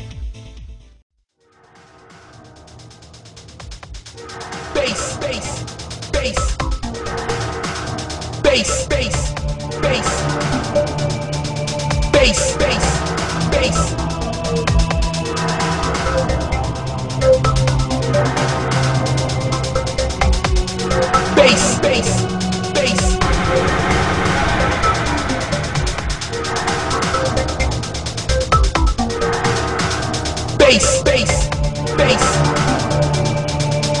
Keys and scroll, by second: 13.1 ctrl+z, 20.8 ctrl+z.